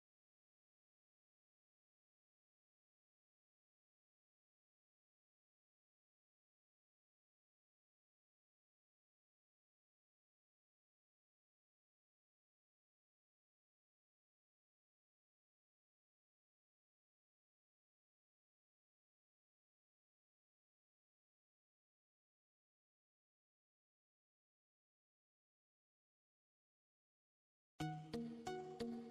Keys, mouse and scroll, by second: 0.2 Tab, 1.1 click, 4.5 Tab, 5.1 click, 7.1-7.6 scroll up 1, 8.3 click, 10.2 s, 11.5 ctrl+z, 16.6 click, 18.1 click, 19.0 KP_7, 19.4-20.3 scroll down 4, 20.3-21.3 scroll up 4, 21.3-21.8 scroll down 5, 23.0 click, 23.9-24.9 scroll up 5, 24.9-25.7 scroll down 1, 25.7-27.2 drag, 28.0 Tab.